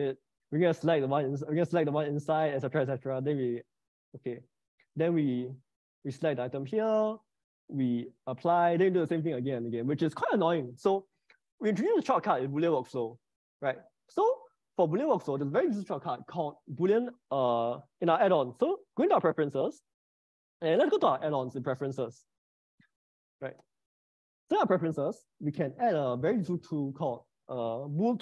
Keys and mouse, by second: 1.9 click, 4.6 click, 7.9 click, 11.3 ctrl+z, 11.6 ctrl+z, 13.0 ctrl+z, 13.3 ctrl+z, 14.1 ctrl+z, 14.8 ctrl+z, 18.2-19.6 drag.